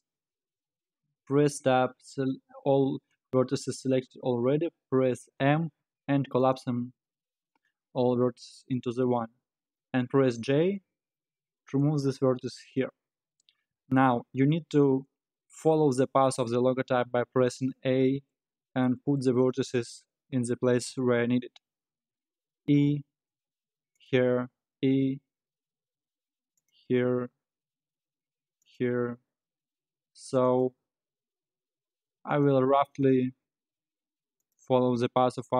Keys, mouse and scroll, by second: 0.2-0.8 scroll up 5, 1.2 scroll down 1, 1.4 Tab, 5.3 m, 7.0-7.3 scroll down 8, 7.6-8.0 scroll up 4, 8.0-8.7 scroll down 5, 10.1 g, 18.2-18.9 scroll down 1, 18.9-19.3 scroll up 2, 19.3 scroll down 2, 22.1 e, 24.6 e, 28.8 e, 30.8 e, 34.6 e.